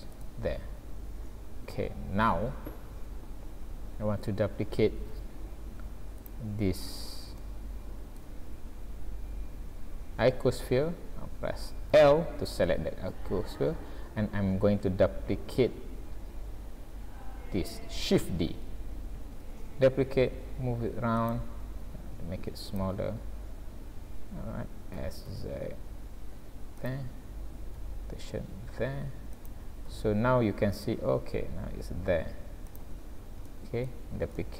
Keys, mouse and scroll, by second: 0.7 scroll down 2, 1.5 scroll down 1, 3.3-3.8 scroll up 1, 3.8-4.2 scroll down 1, 5.1 alt+a, 5.6 scroll up 2, 6.2 click, 6.9 scroll up 2, 7.4 shift+middle click, 8.8 scroll down 1, 9.3-9.7 scroll up 1, 11.9 l, 13.2 scroll down 1, 14.1-14.5 scroll down 1, 19.2 shift+d, 21.8 s, 25.2 s, 27.8 r, 29.9 g, 33.5 shift+middle click.